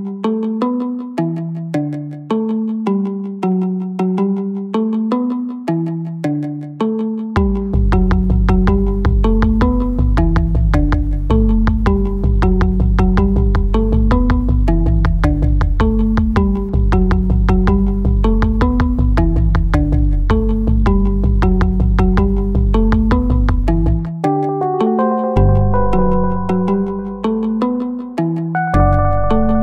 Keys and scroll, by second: 2.4 2, 3.6 5, 4.0 m, 4.1 m, 5.2 Tab, 27.0 Tab.